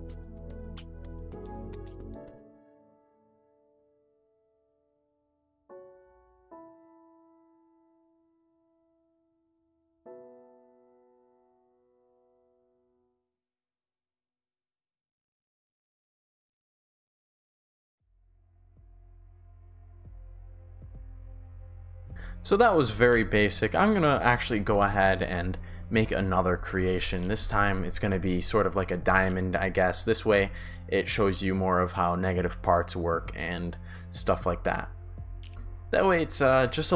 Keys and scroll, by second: 0.3 shift+w, 2.4 shift+d, 3.4 shift+s, 3.9 shift+w, 5.8-9.3 typing, 11.9 shift+s, 12.3 shift+w, 13.3 shift+s, 15.6-16.8 typing, 18.3-21.2 typing, 22.1 Pause, 22.9-26.4 typing, 35.4 Pause, 36.4 shift+a, 36.7 shift+d.